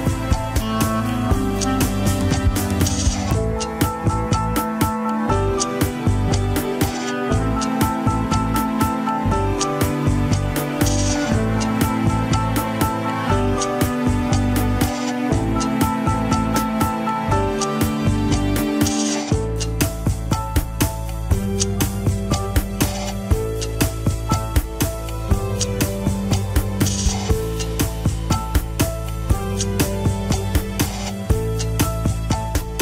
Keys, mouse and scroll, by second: 1.9-7.9 drag, 7.9 scroll down 1, 8.2 middle click, 8.7-12.0 drag, 12.0 alt+z, 13.0 ctrl+click, 13.7 alt+z, 13.8 middle click, 14.6 click, 15.1 middle click, 15.6 alt+z, 16.5 ctrl+click, 16.6 scroll up 3, 16.8 middle click, 17.1 scroll down 1, 17.5 click, 18.4 middle click, 18.8 alt+z, 19.2 click, 19.8 middle click, 20.3-21.5 drag, 21.5-22.6 middle drag, 22.6-23.6 drag, 23.6 middle click, 24.4 alt+z, 25.2 ctrl+click, 25.2 alt+z, 25.4-27.8 middle drag, 27.8-28.3 scroll down 1, 28.6 ctrl+s, 29.6 ctrl+Tab, 30.1 alt+z, 30.6 shift+z, 31.2 click, 32.2-32.8 middle drag.